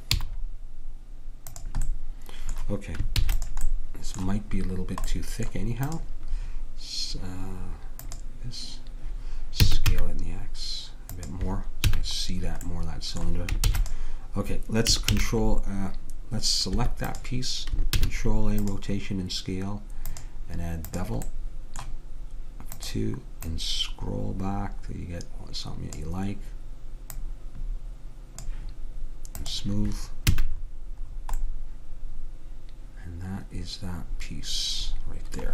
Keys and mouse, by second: 0.2 z, 3.3 ctrl+s, 6.0-7.9 drag, 8.1-9.8 drag, 9.6 s, 12.0 a, 13.7 ctrl+s, 15.2 ctrl+a, 17.2-19.0 drag, 18.0 ctrl+a, 20.1-22.1 drag, 22.9-25.3 drag, 27.2-28.9 drag, 29.5-31.3 drag, 30.3 a, 31.3-32.9 middle drag.